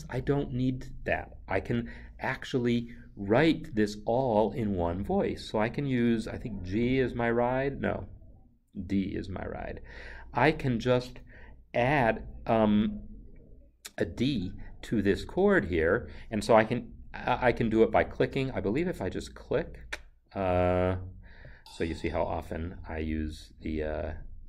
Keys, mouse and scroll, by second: 1.7 n, 21.5 click.